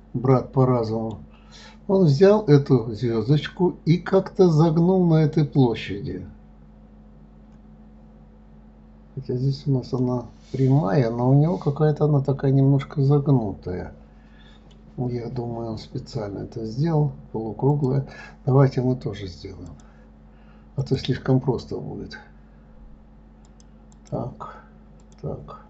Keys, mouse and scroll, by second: 0.8-6.8 middle drag, 10.4-13.4 middle drag, 18.1 click, 20.1 click, 21.2 click, 23.8 click, 25.4 click.